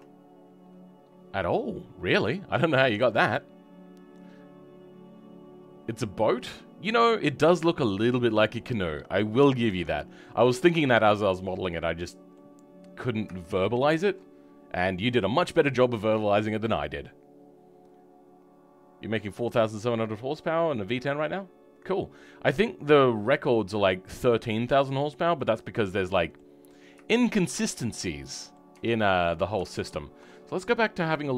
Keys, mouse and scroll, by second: 0.6-6.3 scroll down 2, 6.3-7.0 scroll up 1, 7.0 middle click, 7.4 right click, 11.5 middle click, 12.5-13.4 scroll up 3, 13.4-22.6 shift+middle drag, 22.6-22.9 scroll down 3, 22.9-26.6 middle drag, 26.6 scroll up 2, 27.0-28.7 shift+middle drag, 28.7 Tab.